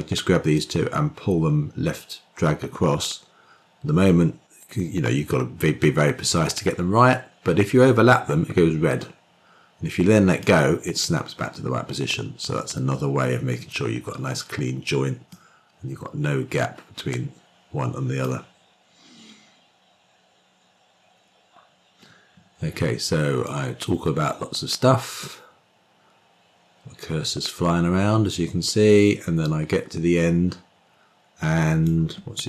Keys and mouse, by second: 0.4-10.3 drag, 15.3-18.1 drag, 23.5-31.8 drag.